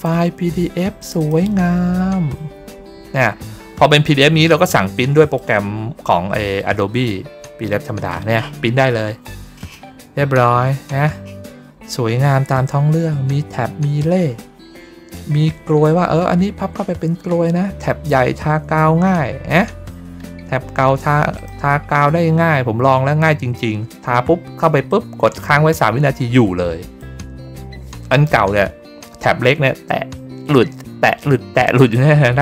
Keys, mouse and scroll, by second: 0.9 click, 1.1 click, 2.5 middle click, 2.9 middle click, 3.2 middle click, 4.8 click, 7.6 middle click, 8.0 middle click, 8.3 middle click, 8.7 middle click, 9.0 middle click, 9.3 middle click, 9.7 middle click, 10.1-12.0 middle drag, 13.0 middle click, 19.1 middle click, 19.2 middle click, 19.5 middle click, 19.8 middle click, 20.1 middle click, 21.2 click, 22.1 middle click, 22.4 middle click, 24.8-26.9 drag, 31.9 middle click, 32.3 middle click.